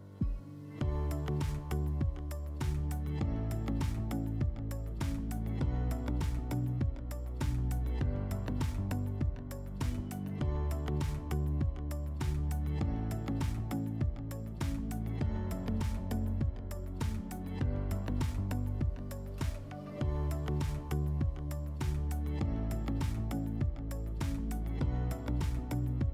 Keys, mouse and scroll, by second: 0.0-0.7 typing, 5.3-8.3 typing, 13.4-15.5 drag, 15.9-19.4 drag, 20.5 click.